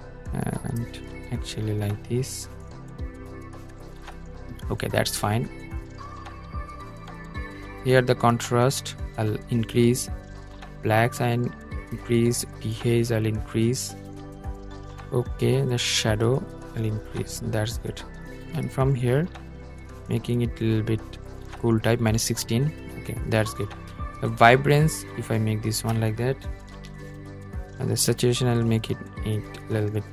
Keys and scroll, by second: 25.7 super+z.